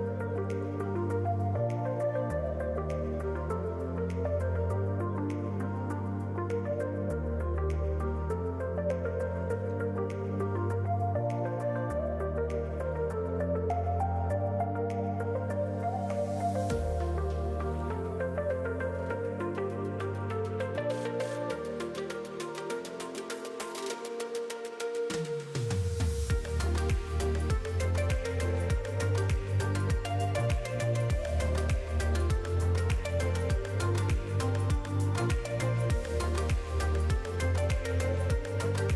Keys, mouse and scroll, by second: 0.8 shift+click, 2.2 ctrl+j, 7.3 click, 9.8 alt+a, 9.9 middle click, 10.3-11.0 scroll up 1, 15.5-16.1 scroll down 3, 15.7 middle click, 16.1 click, 17.2 click, 17.4 click, 18.1 e, 25.4 shift+d.